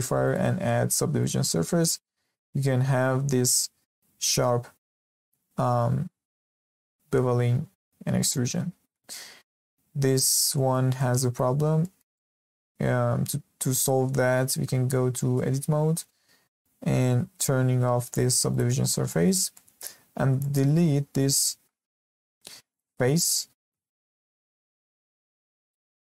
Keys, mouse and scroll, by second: 0.2-2.2 drag, 2.2 scroll down 2, 2.8-3.8 scroll up 2, 3.8-4.5 scroll up 2, 4.5-6.8 scroll up 2, 7.4-8.6 scroll down 2, 8.6-8.9 scroll down 3, 8.9-10.0 middle drag, 10.0-10.4 scroll up 2, 10.4-11.5 shift+middle drag, 11.5 scroll up 1, 11.8-15.2 shift+middle drag, 15.3 Tab, 18.5 click, 19.1-20.1 shift+middle drag, 20.1-20.4 scroll up 1, 20.4-22.0 shift+middle drag, 22.0 3, 22.7 click, 23.7 x.